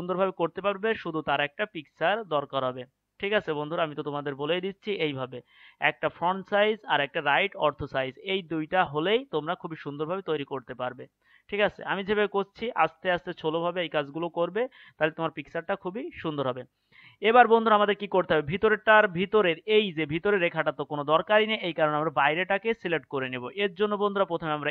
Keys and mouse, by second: 8.7-11.1 right drag, 12.6-14.5 right drag, 22.2-24.7 right drag.